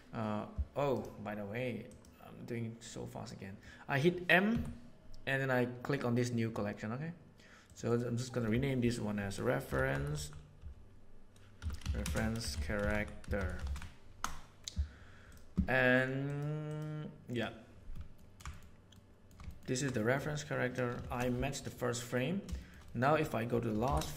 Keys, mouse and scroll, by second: 4.5 m, 8.0-15.0 middle drag, 16.3 middle click, 18.1 ctrl+middle click, 18.5 shift+middle click, 19.0 shift+middle click, 19.4 ctrl+middle click, 19.7 ctrl+middle click, 20.0 middle click, 21.0 shift+Left, 22.9 click, 23.8 shift+Right.